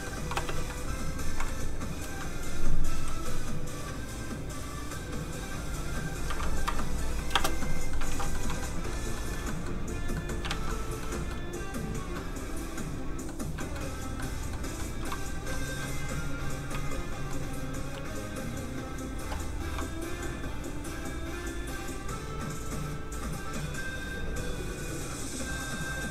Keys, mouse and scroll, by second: 0.0 middle click, 0.3 space, 1.5 click, 6.2 KP_1, 6.3 KP_2, 6.6 Return, 7.3 space, 7.6 middle click, 8.1 alt+shift+z, 8.3 shift+middle click, 9.0 middle click, 9.0 scroll down 1, 9.1 shift+middle click, 9.5 middle click, 9.7 middle click, 10.6 alt+shift+z, 10.7 middle click, 11.1 shift+middle click, 12.1 middle click, 12.2 middle click, 13.3 scroll down 1, 13.6 shift+middle click, 13.9 scroll up 1, 14.2 middle click, 14.8 shift+middle click, 15.5 shift+middle click, 16.7-17.3 shift+scroll down 1, 17.3 scroll down 1, 17.4 middle click, 20.1 click.